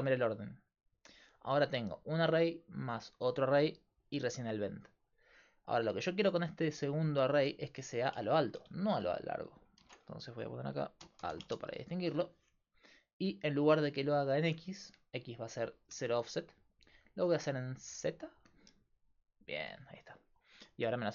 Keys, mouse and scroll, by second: 6.7-11.9 drag, 8.6 BackSpace, 8.7 BackSpace, 14.5-19.7 drag.